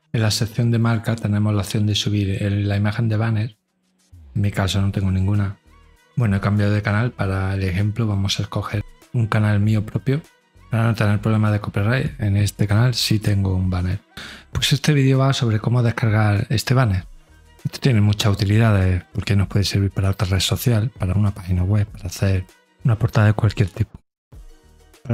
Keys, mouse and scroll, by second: 0.7 click, 1.9 middle click, 6.9 scroll down 2.